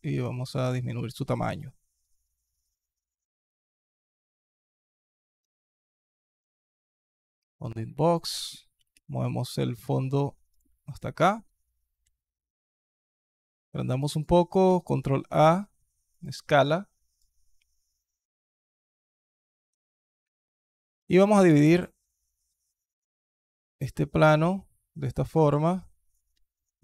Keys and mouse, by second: 4.2 alt+drag, 5.3 alt+click, 6.3 click, 7.4 alt+click, 7.9 click, 8.6 g, 11.0 alt+drag, 11.8 s, 13.6 alt+click, 13.9 alt+click, 14.3 ctrl+a, 17.0-19.0 alt+drag, 19.5 Tab, 20.0 alt+click, 20.8 ctrl+r, 25.6 alt+click, 26.1 alt+click.